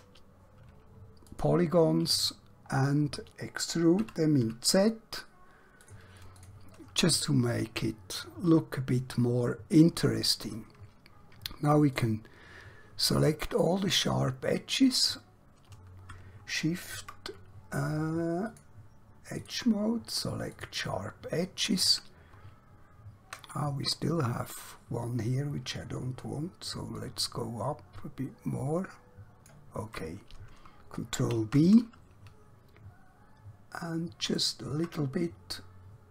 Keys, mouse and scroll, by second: 1.3 click, 2.2 scroll down 1, 2.7-3.5 scroll up 1, 4.0 e, 4.4 z, 5.9 click, 7.3 middle click, 11.1-12.0 scroll up 1, 12.0 click, 18.5 click, 26.4 shift+Num_Lock, 27.0 shift+click, 31.1 ctrl+b, 34.2 shift+click.